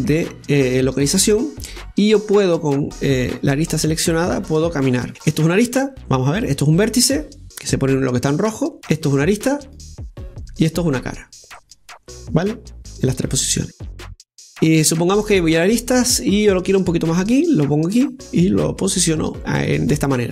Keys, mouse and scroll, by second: 3.6-5.6 drag, 6.6 click, 7.7 right click, 8.7 right click, 9.7 click, 10.5 right click, 11.7 click, 12.4 right click, 14.7 scroll up 1, 15.6 right click, 17.4 right click, 18.3-20.3 drag, 19.8 scroll down 1.